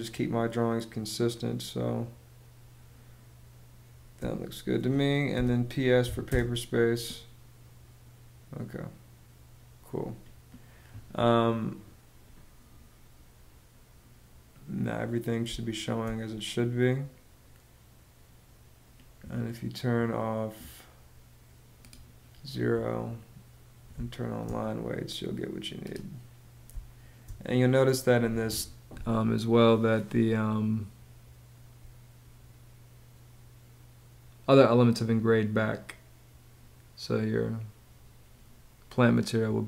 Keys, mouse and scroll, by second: 4.9 p, 5.6 s, 5.9 space, 15.0 space, 23.5 space, 26.3 space.